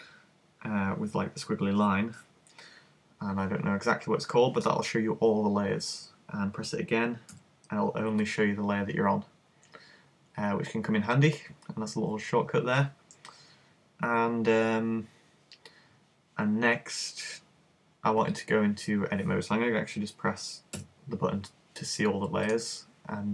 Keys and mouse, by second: 22.5-23.3 drag.